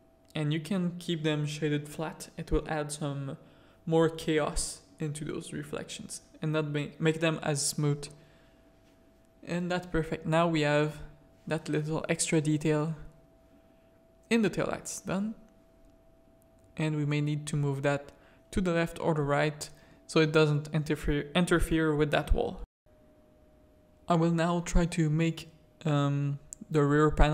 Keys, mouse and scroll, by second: 0.1 /, 1.1-2.2 middle drag, 2.7 middle click, 3.1 z, 8.1 KP_0, 12.8 middle click, 13.8 middle click, 16.4 click, 18.0 middle click, 18.2 alt+a, 20.2 middle click, 24.2 middle click, 24.9-25.4 shift+middle drag, 26.0 click, 26.7 Tab.